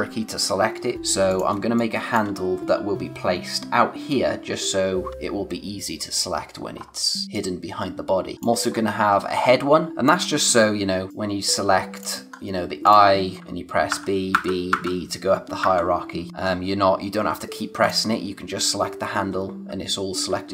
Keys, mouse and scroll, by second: 1.3 click, 1.5 space, 1.8 click, 2.0 space, 6.8-7.1 scroll down 1, 7.2 space, 7.3 click, 7.6 space, 8.6 scroll down 1, 8.7-9.0 scroll up 1, 9.8 space, 9.9 click, 9.9 space, 11.1 click, 12.3 scroll up 1, 12.8 click, 13.9-15.6 typing, 16.3-17.3 scroll down 1, 17.3-17.8 scroll up 1, 17.8 click.